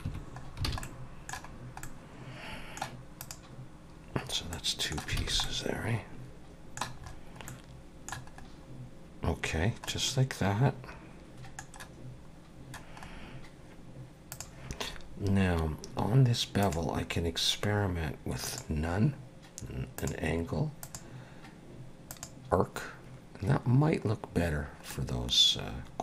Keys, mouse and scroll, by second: 0.1 Tab, 0.4 scroll down 2, 0.7 alt+a, 0.8 middle click, 1.5-1.8 scroll down 2, 1.8 middle click, 3.2 click, 4.3 scroll up 2, 4.5 middle click, 5.2 alt+a, 5.4 middle click, 7.0-7.3 scroll up 2, 7.5 middle click, 8.4 scroll up 2, 9.4-9.9 scroll down 2, 9.9 middle click, 13.0 scroll up 3, 14.3 click, 16.6 click, 18.5 click, 20.0 click, 20.8 click, 24.9 middle click.